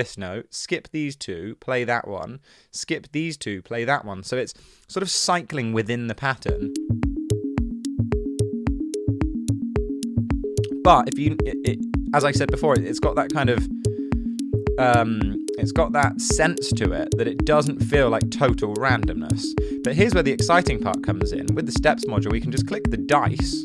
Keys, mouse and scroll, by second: 6.5 space.